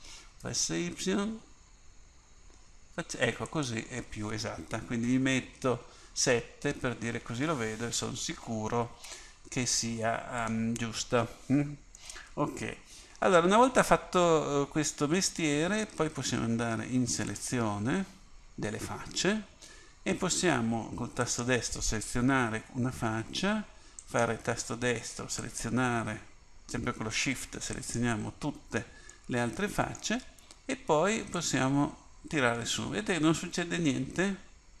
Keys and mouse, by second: 0.0 s, 5.3 KP_7, 12.1-13.2 middle drag, 17.3-21.3 drag, 21.3-29.2 right drag, 29.2-31.4 middle drag, 31.4-33.8 drag.